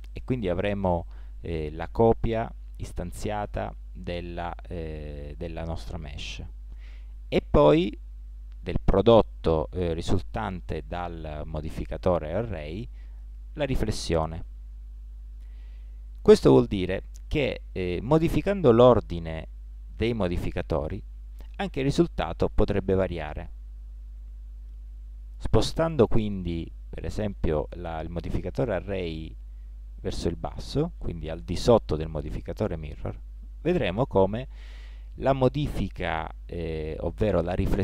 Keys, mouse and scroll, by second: 29.3 click, 33.1-37.8 middle drag.